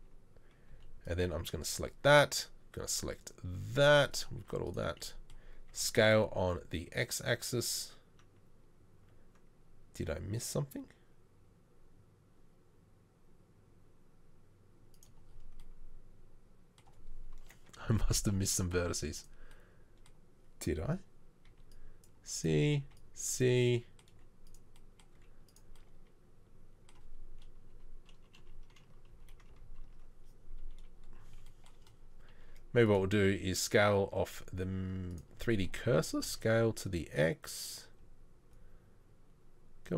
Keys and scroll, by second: 0.7 z, 1.0 c, 4.7 z, 5.9 s, 18.0 ctrl+z, 18.9 z, 21.5 z, 21.8 c, 22.8 c, 24.2 z, 25.2 z, 27.8 KP_Decimal, 28.4 KP_1, 29.1 KP_3, 36.3 s.